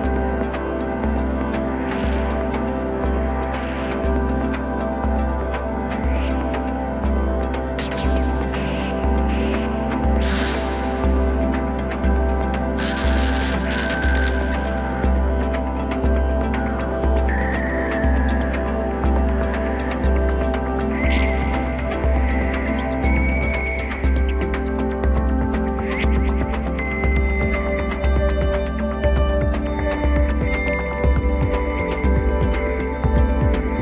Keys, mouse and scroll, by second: 0.9 s, 3.6 g, 7.9-9.6 middle drag, 9.6 KP_7, 10.2-10.9 scroll up 2, 10.9-11.4 shift+middle drag, 11.4-12.3 scroll up 1, 12.3 ctrl+r, 17.7 3, 20.3 click, 24.3 ctrl+z, 24.7 ctrl+z, 24.9 ctrl+z, 26.1 shift+r, 29.3-30.7 right drag, 30.7 ctrl+r.